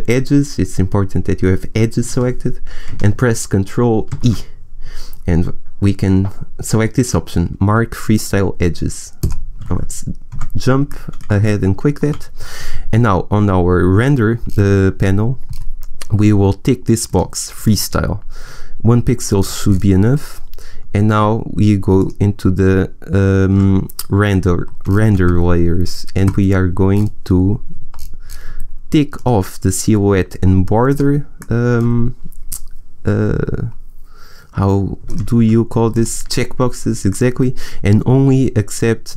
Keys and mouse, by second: 2.4 a, 4.0 ctrl+e, 10.3 Tab, 14.6-17.0 middle drag, 17.0-19.9 drag, 19.9-21.9 middle drag, 21.9-23.7 drag, 29.1-31.3 middle drag, 31.3-35.0 drag, 32.5-35.0 middle drag, 35.9-39.1 drag, 37.1-39.1 middle drag.